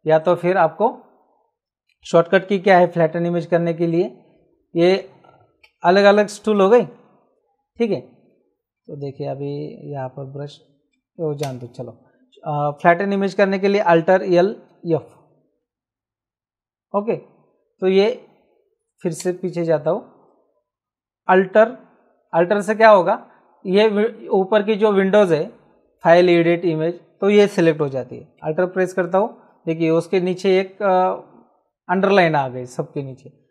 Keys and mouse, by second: 0.2 click, 5.6 v, 6.1 click, 7.4 g, 9.0 b, 11.4 ctrl+z, 15.0 alt+f, 19.2 ctrl+z.